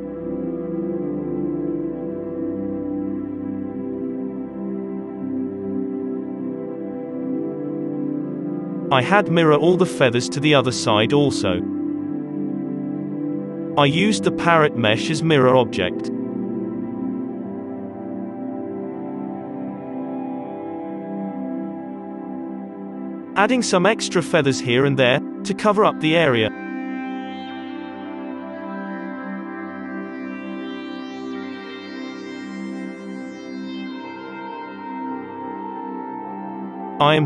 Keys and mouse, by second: 0.3 z, 0.8 KP_Divide, 1.9 ctrl+s, 1.9 middle click, 2.2 click, 2.2 z, 2.4-3.5 middle drag, 3.7 middle click, 3.8 KP_3, 4.1 z, 4.5 ctrl+s, 4.9 z, 9.7-10.8 drag, 10.0 alt+a, 10.8-16.4 middle drag, 15.6 z, 15.6 KP_3, 16.4 click, 16.8 z, 18.2-19.3 drag, 19.3-20.8 middle drag, 19.3-20.9 typing, 21.6-22.9 drag, 22.2-29.8 typing, 24.2 alt+a, 24.4-26.2 drag, 24.7 alt+a, 25.2 alt+a, 29.4 alt+a, 29.8 middle click, 30.0 click, 30.8-33.9 middle drag, 33.9-35.9 drag, 35.9 alt+a, 35.9 n, 36.8 KP_3.